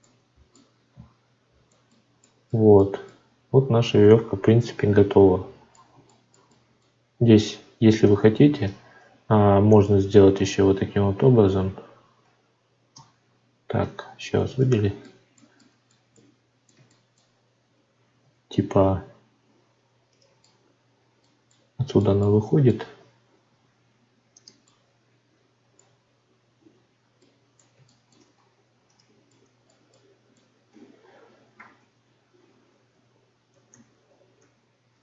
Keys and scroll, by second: 8.0 Tab, 12.9 Tab, 26.4 ctrl+z.